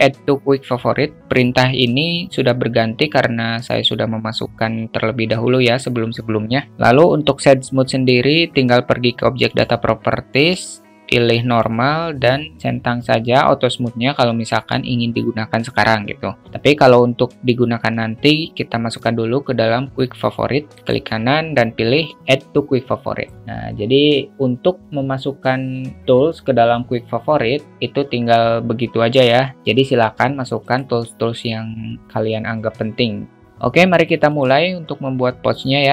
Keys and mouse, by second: 11.5 click, 30.6 click, 34.2 click.